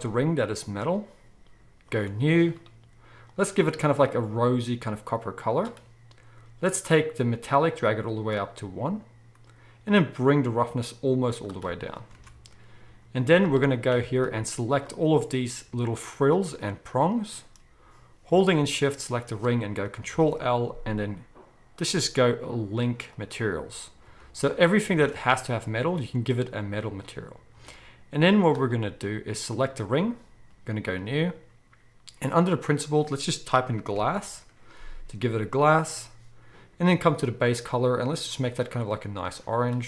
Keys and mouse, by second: 1.9-3.4 drag, 3.4-7.6 middle drag, 7.6-14.7 drag, 12.2 alt+a, 13.1 z, 14.7-29.5 middle drag, 20.0 ctrl+l, 24.0 z, 25.0 alt+a, 27.5 z, 29.5-30.6 drag, 30.6 middle click, 30.8-37.5 drag, 33.9 l, 37.5-39.8 middle drag.